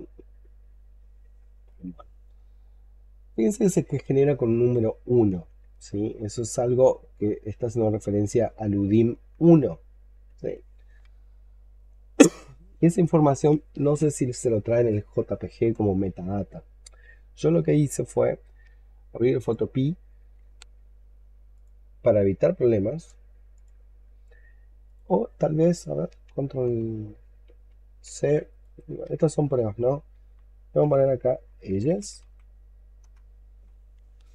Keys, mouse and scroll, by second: 4.3-5.6 scroll down 5, 5.7 alt+middle click, 7.8-8.8 scroll down 7, 8.8 alt+middle click, 9.3-11.3 alt+scroll up 1, 28.9 ctrl+v, 30.7 F2, 31.3-32.5 typing, 32.9 Return.